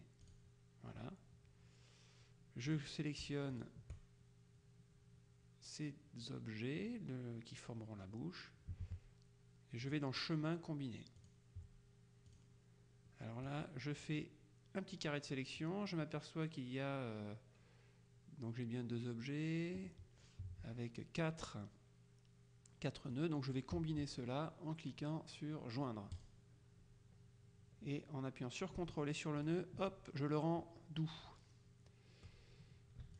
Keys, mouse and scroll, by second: 0.4 click, 2.8 click, 3.6 shift+click, 10.0 click, 11.3 click, 12.4 click, 13.6-15.9 drag, 23.2 click, 26.2 click, 29.5 ctrl+click.